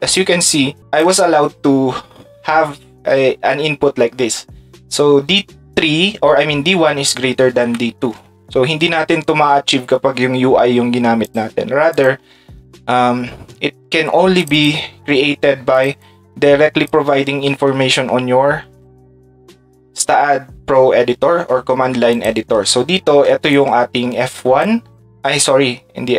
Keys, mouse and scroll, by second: 0.1 ctrl+click, 0.8 ctrl+shift+click, 22.1 ctrl+click, 23.5-24.6 ctrl+shift+drag.